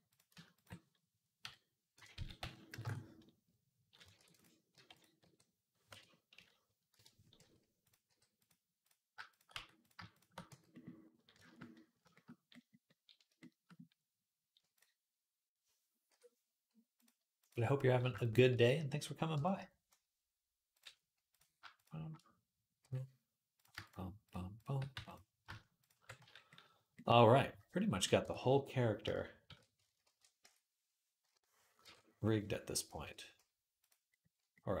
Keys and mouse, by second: 1.2 ., 2.0 s, 4.0 ctrl+r, 4.6 g, 5.0 r, 6.2 ., 7.2 r, 7.9 g, 9.1 shift+click, 9.2-20.6 shift+middle drag, 9.4 f, 10.3 f, 15.9 k, 20.6 click, 21.2-28.8 shift+middle drag, 22.7 j, 24.8 f, 26.0 f, 28.1 Tab, 29.3 shift+d, 29.9 ctrl+a, 30.3 Tab, 31.0 /, 31.6 ctrl+Tab, 32.8 q, 32.9-34.8 middle drag.